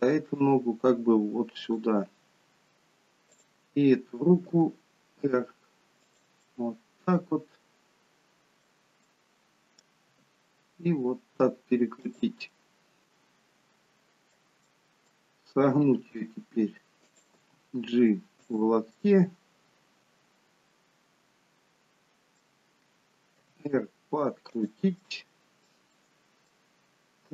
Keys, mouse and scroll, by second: 3.4 click, 4.6 r, 7.5 middle click, 10.2 r, 12.6 middle click, 16.1 middle click, 16.1 r, 17.4 g, 19.1 middle click, 23.6 r, 25.1 middle click, 26.3 middle click.